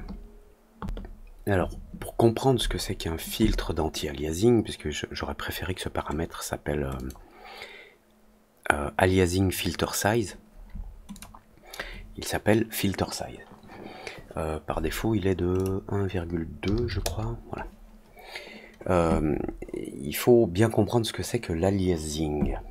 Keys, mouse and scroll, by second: 6.9 click, 11.0 click, 15.5 click.